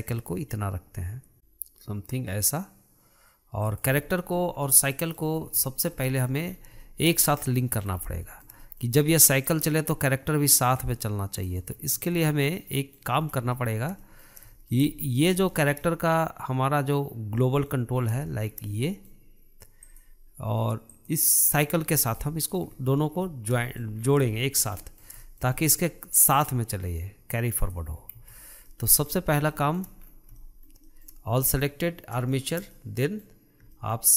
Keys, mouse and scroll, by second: 4.2-4.9 scroll down 1, 4.9-6.8 middle drag, 6.8-7.1 scroll up 4, 7.1-8.2 shift+middle drag, 8.2 scroll up 1, 8.3 scroll down 2, 8.5-9.7 shift+middle drag, 9.7 click, 12.4 ctrl+z, 12.9-13.5 middle drag, 13.5-13.8 scroll up 2, 13.8-15.5 shift+middle drag, 15.5 scroll up 2, 15.8-18.2 shift+middle drag, 18.2-18.5 scroll up 3, 18.5-20.2 shift+middle drag, 20.2 click, 21.2 click, 21.8-22.4 scroll down 6, 21.9-24.3 middle drag, 23.0-23.5 scroll down 3, 24.3-24.6 scroll up 2, 24.6-26.7 shift+middle drag, 26.7 click, 28.7-29.0 scroll down 2, 29.0 middle click, 29.4-29.8 scroll up 3, 29.8-30.3 shift+middle drag, 30.3-30.7 scroll up 3, 30.7-34.1 shift+middle drag.